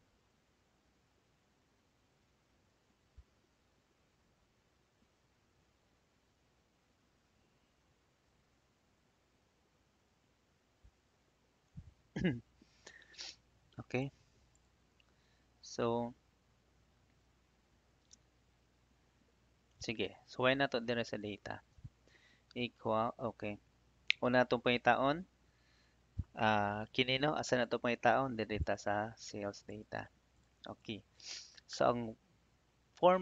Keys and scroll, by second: 13.5 Escape.